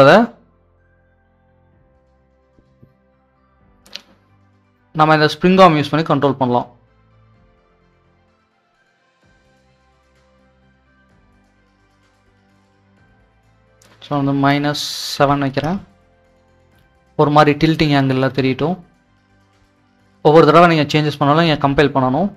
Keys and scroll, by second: 14.4-15.1 typing, 15.6 Return, 21.6 typing.